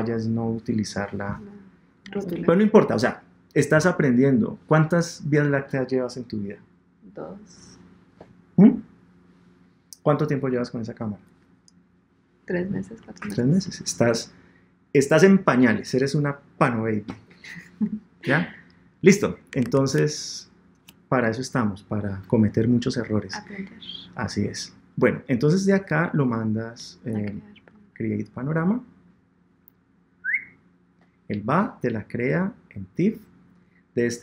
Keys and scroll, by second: 19.6 super+Tab.